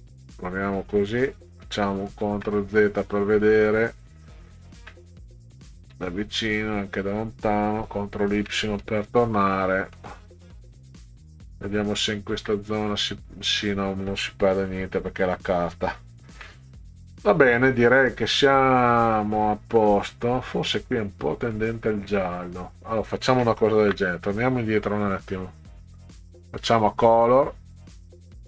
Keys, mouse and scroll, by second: 5.2 ctrl+scroll down 2, 6.2 ctrl+scroll down 2, 8.3 ctrl+y, 9.6 middle click, 12.3 ctrl+z, 19.8 middle click, 21.6-22.8 middle drag, 25.9 click.